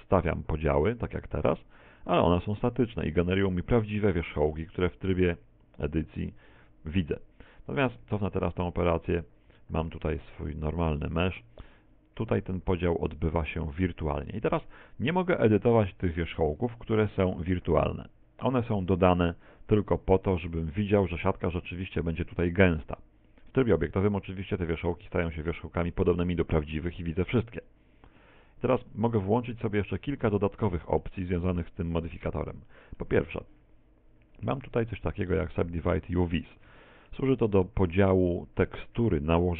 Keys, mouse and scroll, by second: 0.8 w, 4.6 Tab, 6.6 Tab, 7.8 ctrl+z, 8.1 ctrl+z, 8.4 ctrl+z, 9.0 ctrl+z, 10.5 right click, 11.0 right click, 11.2 a, 11.4 a, 14.4-15.8 scroll up 3, 15.8 right click, 15.8-16.6 scroll up 2, 16.6 right click, 17.1 right click, 17.5 right click, 18.0 right click, 18.5 right click, 21.2 z, 21.6 Tab, 21.9 z, 23.8 middle click, 25.2 shift+middle click, 26.3 middle click, 27.6 middle click, 28.4 middle click, 29.2 middle click, 29.6 scroll up 1, 29.9 scroll down 2, 30.5 shift+middle click, 31.4 Tab, 32.7 middle click, 33.2 middle click.